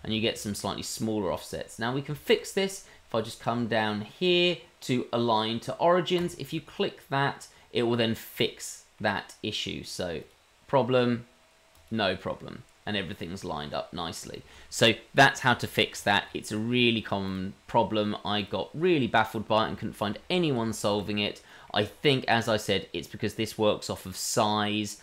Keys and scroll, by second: 20.9 shift+z.